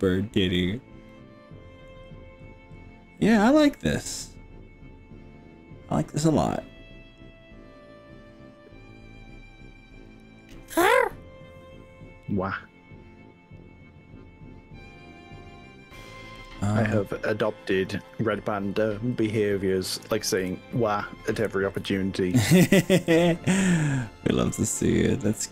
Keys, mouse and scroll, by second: 0.2-0.8 scroll up 4, 1.1 middle click, 1.9-2.8 scroll down 4, 3.2-16.2 middle drag, 16.5-17.0 middle drag, 17.5 click, 18.1-19.0 middle drag, 19.0 click, 19.2 middle click, 19.6 middle click, 20.4 KP_1, 21.4 KP_2, 21.8 KP_3, 23.0 g.